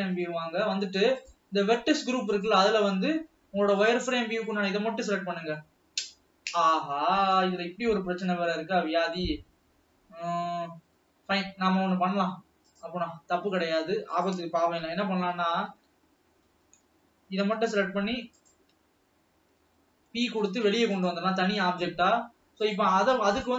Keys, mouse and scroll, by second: 1.5-5.7 drag, 13.1-14.6 drag, 15.4 Tab, 16.6 alt+a, 16.9 l, 18.1 p, 20.3 Tab, 21.1 alt+a, 21.4 click, 22.9 click.